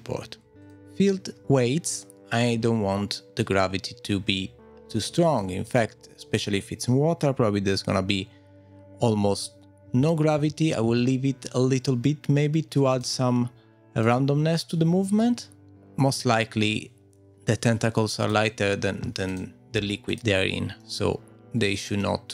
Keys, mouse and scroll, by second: 0.4 scroll up 4, 0.6 click, 1.4-2.6 scroll down 4, 2.6-3.4 scroll down 7, 3.4 click, 5.7 click, 12.9 click, 18.2 click, 20.8 click, 20.8 middle click, 21.3-21.7 scroll down 4, 22.0 middle click.